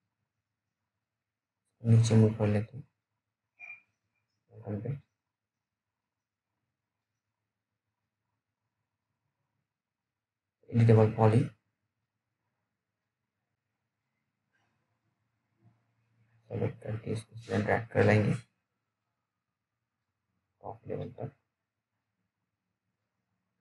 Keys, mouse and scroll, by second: 0.0-1.4 scroll up 1, 1.4 click, 1.4 click, 2.2-2.6 scroll down 1, 2.6 middle click, 3.7 click, 4.5 scroll down 1, 4.7 middle click, 5.8 click, 7.2 middle click, 7.6-8.9 scroll up 1, 9.6 click, 12.2 right click, 13.6 click, 15.7-17.1 scroll down 1, 17.1 super+middle click, 17.8 scroll down 1, 18.0 middle click, 19.4 scroll up 1, 20.8 click, 22.0 scroll down 1, 22.4 alt+middle click, 23.5 right click.